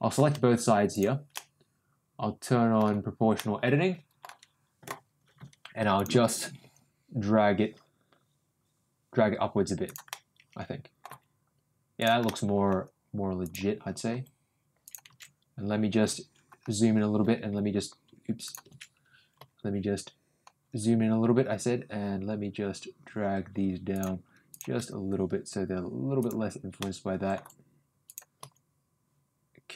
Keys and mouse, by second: 0.9 shift+click, 1.3-2.7 middle drag, 3.4 middle click, 5.9 click, 6.6 g, 10.0 middle click, 11.0 g, 12.2 middle click, 13.4 click, 14.1 g, 16.0 ctrl+g, 19.3 ctrl+g, 24.5 click, 24.7 g, 26.7 middle click, 28.0 click, 28.4 g.